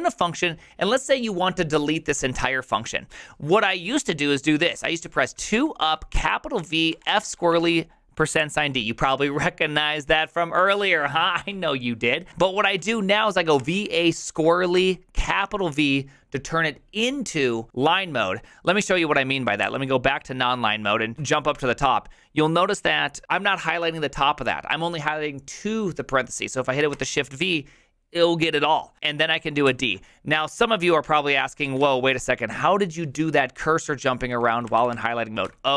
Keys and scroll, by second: 0.1 j, 5.2-8.4 typing, 11.5 u, 12.6 ctrl+c, 12.8-14.7 typing, 19.6 v, 21.1 o, 26.9 v, 29.7 d, 31.7 ctrl+c, 31.8 u, 34.0-35.7 typing.